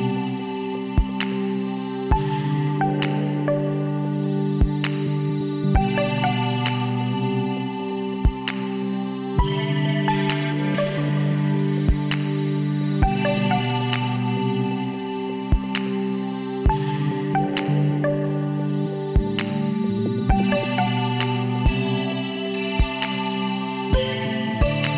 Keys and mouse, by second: 0.8 s, 3.2 e, 7.9-9.7 drag, 9.7 s, 13.9 s, 15.8-16.9 middle drag, 22.3 click, 23.2 shift+d, 24.5-24.9 drag.